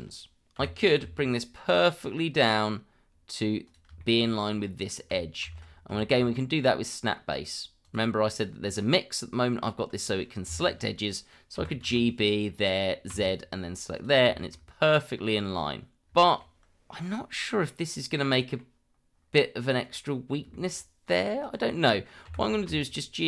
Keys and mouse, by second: 0.6 g, 1.0 z, 4.0 shift+middle drag, 5.4 ctrl+z, 6.0 shift+middle drag, 7.8-10.5 drag, 11.5 g, 11.8 b, 12.5 click, 13.1 z, 14.3 shift+middle click, 16.2 shift+middle drag, 17.7-18.6 middle drag, 19.8 click, 20.5 shift+middle drag, 21.0 click, 21.4 click, 22.2 g, 22.6 z.